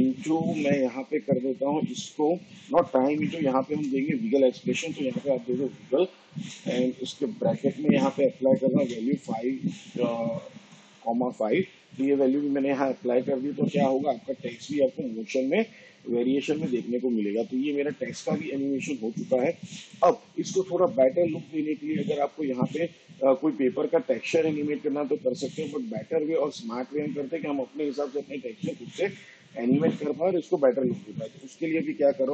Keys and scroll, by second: 2.9 BackSpace, 4.3-10.6 typing.